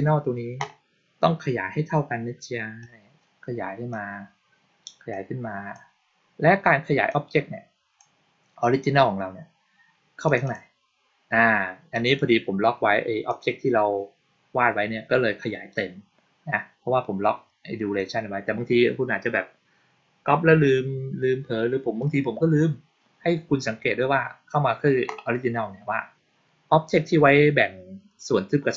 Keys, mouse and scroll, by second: 2.7-3.8 drag, 5.0-5.6 drag, 6.9 click, 10.1 click, 10.3 click, 13.1 click, 26.8 click.